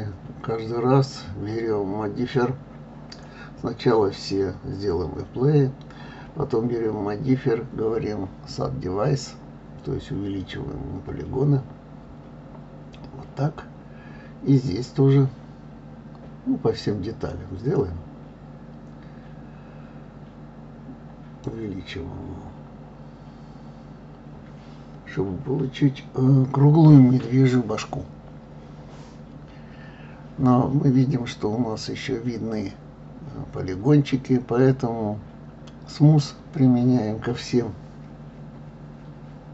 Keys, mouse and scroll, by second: 1.3 click, 2.7 click, 5.1-7.0 drag, 9.7-12.8 drag, 13.4 click, 14.9-17.9 drag, 19.1 click, 20.3 click, 20.9-23.7 drag, 24.8-27.8 drag, 28.9 click, 30.1-33.1 drag, 33.8-36.2 right drag, 36.2 click, 36.7-38.5 right drag, 38.5 click, 39.0-39.5 right drag.